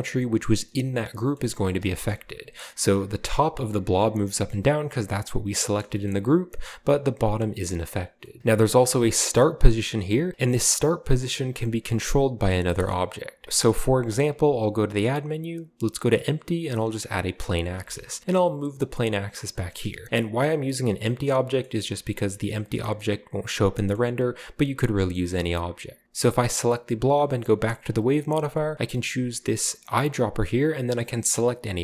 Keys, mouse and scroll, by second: 0.6-1.9 middle drag, 2.1-2.8 shift+middle drag, 4.1-4.5 scroll down 2, 4.2-5.5 middle drag, 5.8 shift+middle drag, 6.1-6.9 shift+middle drag, 6.9 scroll up 1, 9.3 click, 12.4 scroll down 1, 14.1 shift+a, 17.3 click, 17.7 scroll down 1, 17.9-18.2 middle drag, 18.2 g, 19.4 click, 19.7 shift+middle drag, 19.8 shift+drag, 20.1 middle click, 20.1-20.9 scroll up 1, 21.6-22.2 middle drag, 21.7 g, 21.9-22.7 drag, 22.5 middle drag, 23.0 middle click, 23.9-24.9 middle drag, 25.1 right click, 26.8 g, 29.9 click.